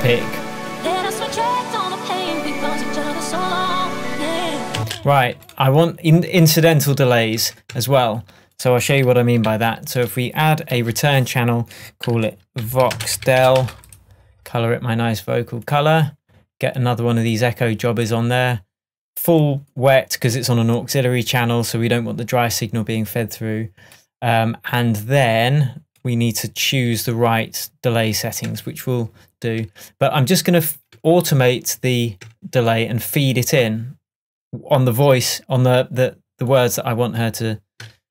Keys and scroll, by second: 4.8 space, 6.4 shift+Tab, 7.5 shift+Tab, 9.5 alt+super+t, 11.8 super+r, 12.7 shift+o, 13.3 shift+e, 28.5 Tab, 30.9 Tab.